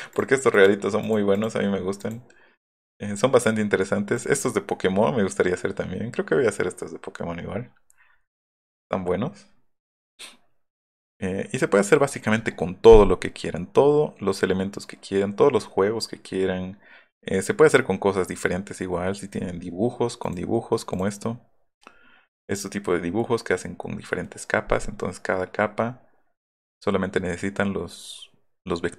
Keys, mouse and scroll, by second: 0.2 click, 0.5 click, 1.1 click, 2.5 scroll down 1, 8.2 scroll down 1, 9.4 scroll down 1, 18.9-19.5 scroll up 4, 27.2 scroll down 2, 28.3-28.8 scroll down 4.